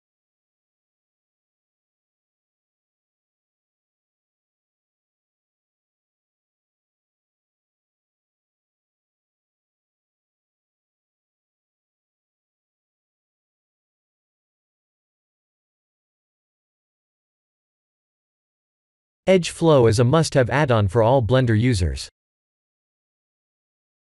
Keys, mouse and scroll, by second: 0.6 alt+click, 1.3 g, 3.3 s, 5.3 alt+click, 7.2 s, 9.7 alt+click, 10.7 alt+shift+click, 13.3 shift+z, 14.0 scroll up 2, 14.5 middle click, 14.6 middle click, 15.1 middle click, 15.4 middle click, 16.1 shift+z, 16.5 middle click, 17.2 ctrl+e, 20.4 Tab, 20.9 middle click, 21.9 middle click, 22.1 middle click, 22.3 middle click, 22.7 middle click, 23.3 shift+middle click.